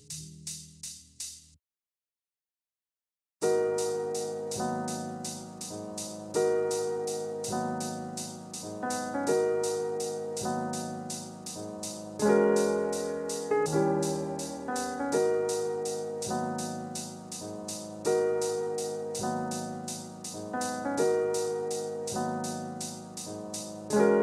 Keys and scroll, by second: 2.9 ctrl+space, 12.9 ctrl+space.